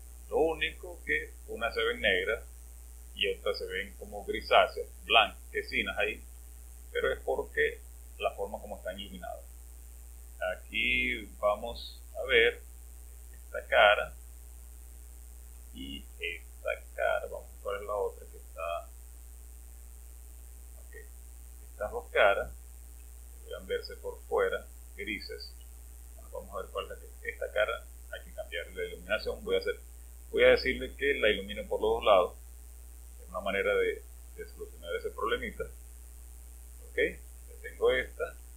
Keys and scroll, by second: 11.9 space, 17.5-18.0 typing, 19.9 typing, 26.3 space.